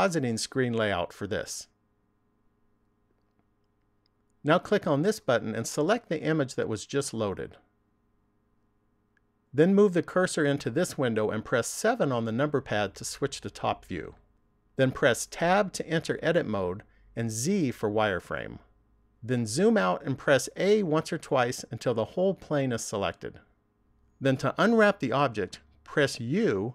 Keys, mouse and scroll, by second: 2.0 click.